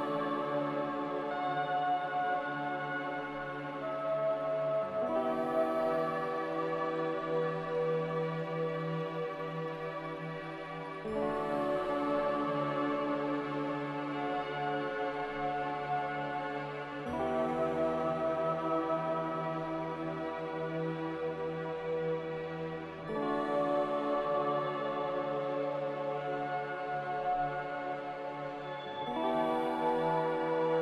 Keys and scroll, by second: 0.0 c, 21.6 z, 24.0 c.